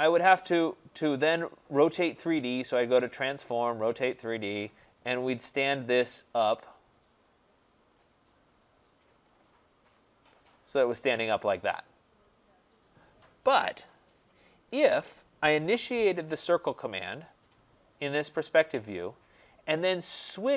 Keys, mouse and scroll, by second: 0.0 click, 3.2 click, 3.9 click, 4.9 click, 5.7 click, 7.8-8.6 scroll, 9.2 click, 9.9 click, 10.5-10.9 scroll, 11.2 click, 14.7 click, 15.5 Delete, 17.2 click, 18.4 click, 20.2 click, 20.4 click.